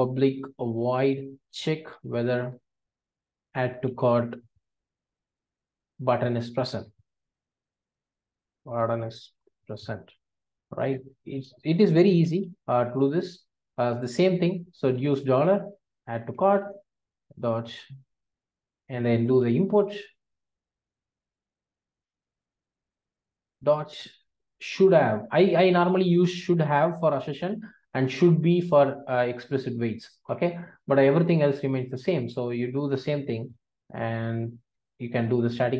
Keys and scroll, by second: 13.1 alt+super+l, 16.6 Return, 19.5 alt+Return, 23.1 ctrl+space, 24.5 ctrl+space, 30.2 Return, 34.9 alt+Return.